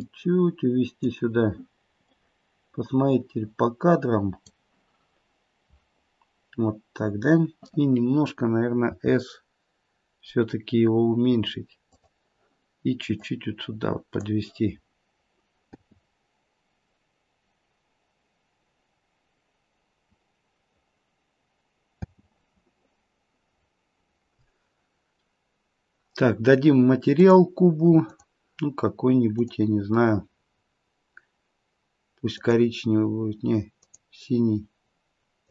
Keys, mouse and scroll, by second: 2.1 click, 8.9 s, 13.1 click, 15.7 space, 22.0 space, 23.5-23.9 scroll up 1, 24.9-25.9 scroll up 1, 27.2 click, 28.0 click.